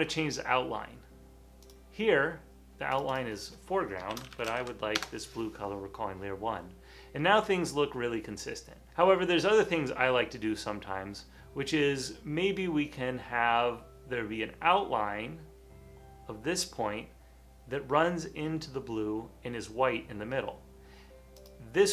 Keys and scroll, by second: 0.9 typing, 4.0-5.1 typing.